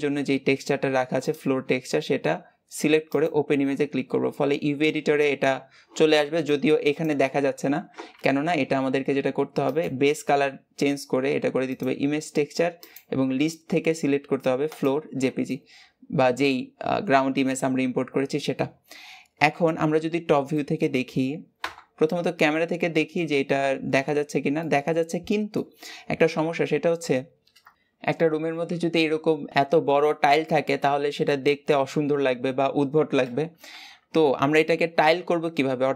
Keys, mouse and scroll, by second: 11.7 click, 12.7-15.5 drag, 15.5-19.3 middle drag, 19.3 KP_7, 20.4-21.5 middle drag, 21.5 KP_0, 22.5-23.6 scroll up 2, 24.5-26.1 middle drag, 26.1 KP_7, 26.9-27.6 scroll down 2, 27.6-35.9 shift+middle drag.